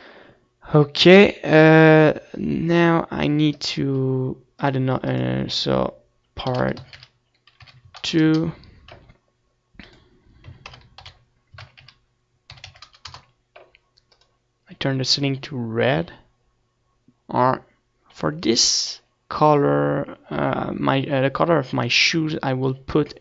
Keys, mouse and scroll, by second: 2.9-5.1 middle drag, 5.1-10.0 right drag, 6.3-10.0 drag, 16.7 click.